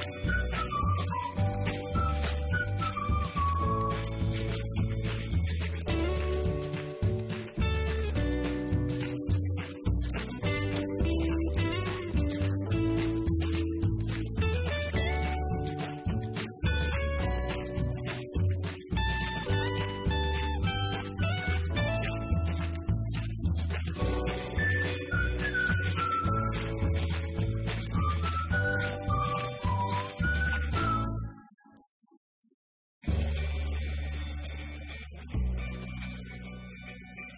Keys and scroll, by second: 2.5 2, 4.1 5, 6.8-8.7 typing.